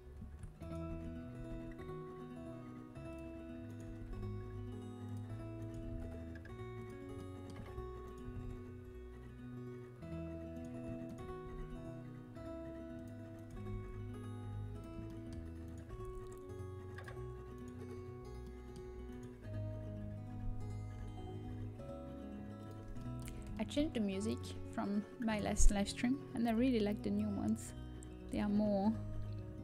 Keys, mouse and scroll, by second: 0.5-2.0 right drag, 0.8 z, 1.3 g, 2.0 click, 3.6-6.7 drag, 5.7 g, 12.0 g, 13.3-15.3 right drag, 16.0 right click, 16.0 g, 17.0 right click, 22.5 g, 24.6 z.